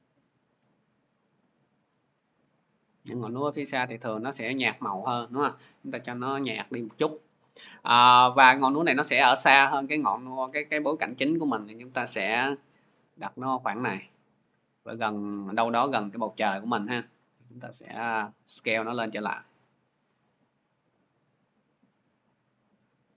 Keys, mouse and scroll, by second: 4.4 click, 8.6-13.6 drag, 14.8-19.8 drag, 20.1-23.1 shift+drag.